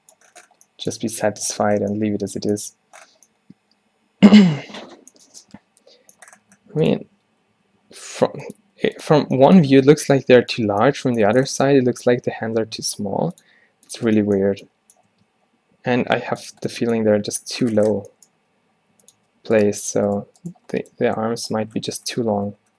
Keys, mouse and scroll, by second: 5.2-6.5 middle drag, 7.2 Tab, 7.4 a, 7.6 a, 7.9 s, 8.7 g, 9.3 Tab, 10.0 a, 12.0 Tab, 12.3 a, 12.8 a, 13.1 s, 13.6 r, 14.1 Tab, 15.2 Tab, 15.4 g, 16.6 Tab, 17.2 a, 18.1 Tab, 18.5 g, 19.3 Tab, 19.8 Tab, 21.1 g.